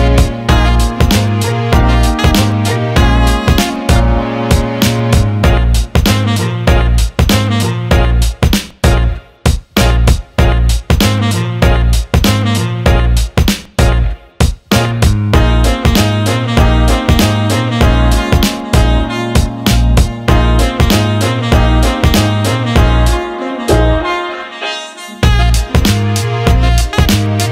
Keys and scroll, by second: 3.8 Escape.